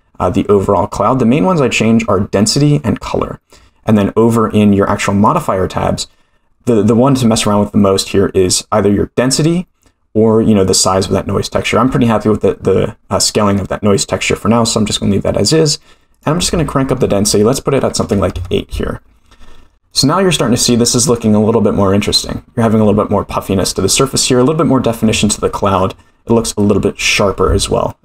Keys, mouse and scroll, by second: 5.2 click, 16.1-19.2 drag, 19.9 middle click, 21.2 scroll up 2, 23.6-24.0 middle drag, 25.2-25.6 shift+middle drag, 27.0-28.0 drag.